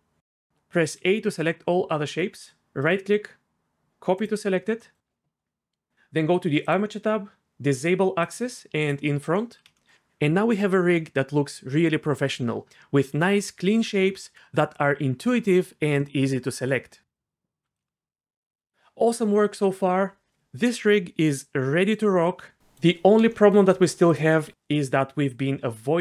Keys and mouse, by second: 0.0 ctrl+z, 0.0 a, 0.8 a, 2.8-4.3 right drag, 6.6 click, 8.2 click, 8.8 click, 17.1 shift+click, 18.2 click, 25.3 r.